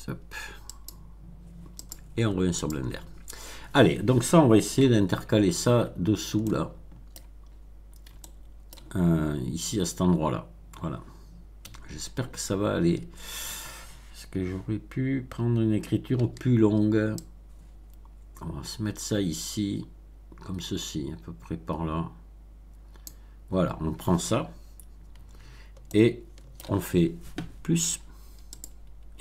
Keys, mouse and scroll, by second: 0.6 click, 1.7 click, 2.5 click, 4.7 Tab, 5.7 scroll up 2, 6.3-7.3 shift+middle drag, 7.4 shift+scroll up 1, 8.1 shift+middle click, 11.6 a, 16.1 b, 17.1-23.2 drag, 24.3 scroll down 1, 25.8 shift+middle click, 28.4 click.